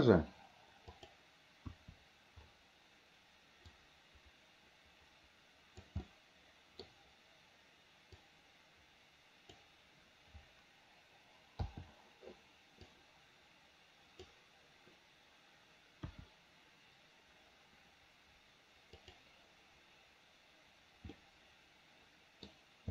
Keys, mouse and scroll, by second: 1.7 KP_1, 3.8-6.0 drag, 6.1 middle click, 8.2-9.7 drag, 11.7 i, 13.0-14.4 drag, 16.1 KP_1, 19.1 click, 21.2-22.6 middle drag.